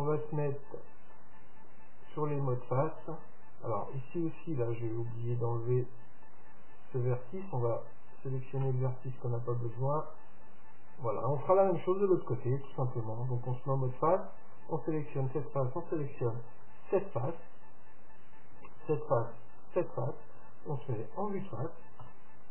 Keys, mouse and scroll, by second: 0.4-2.2 drag, 1.3-3.2 right drag, 2.2-4.1 middle drag, 6.4-8.3 drag, 7.5-9.5 right drag, 8.7 x, 14.0-15.7 drag, 14.6-16.3 right drag, 16.5-18.4 right drag, 18.8-21.6 right drag, 22.1 KP_1.